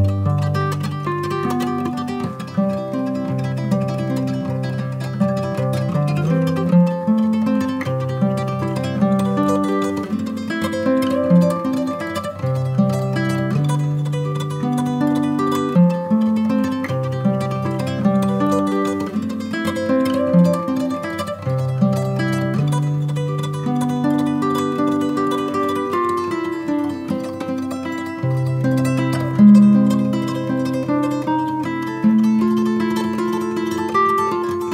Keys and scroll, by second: 16.9 Return.